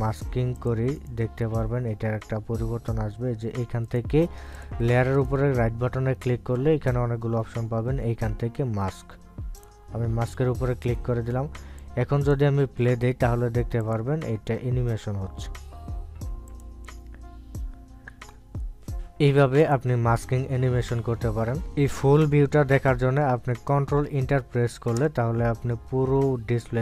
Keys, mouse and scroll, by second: 1.9 right click, 1.9 right click, 4.8 right click, 5.5 click, 6.1 right click, 10.5 click, 12.8-14.8 drag, 17.5 click, 20.6 click, 24.7 click, 26.0 ctrl+Return.